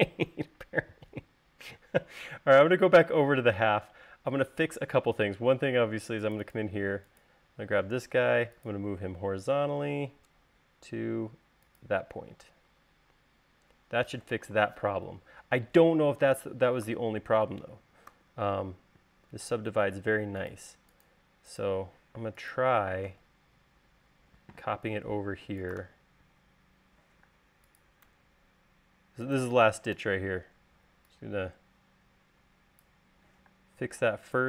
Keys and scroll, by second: 8.0 m, 18.4 u, 19.6 u, 20.3 space, 22.4 m, 27.5 m, 30.4 s, 33.8 m.